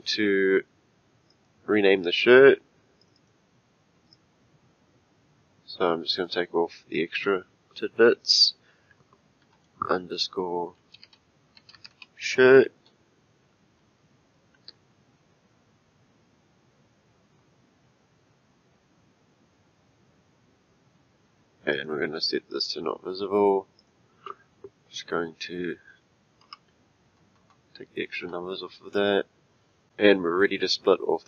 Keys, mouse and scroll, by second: 1.3 click, 3.0 click, 6.2 click, 21.7 click, 22.5 click, 23.8 click, 25.4 F2, 27.2 BackSpace.